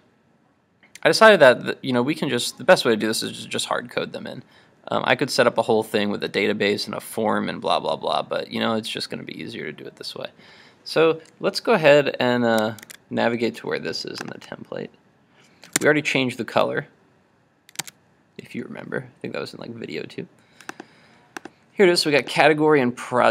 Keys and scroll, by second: 12.9 super+Tab.